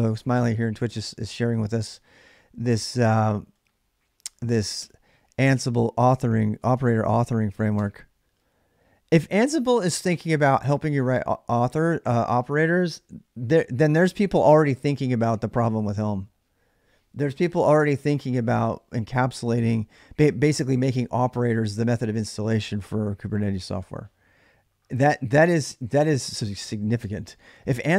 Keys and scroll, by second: 0.0-2.0 typing, 4.5 Return, 5.7 space, 6.5 space.